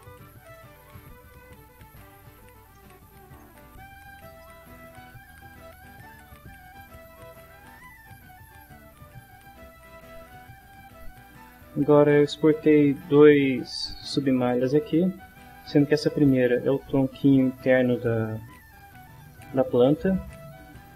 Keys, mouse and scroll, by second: 2.6 scroll down 2, 2.7 middle click, 4.4 middle click, 5.8 middle click, 9.0 click, 20.0 click.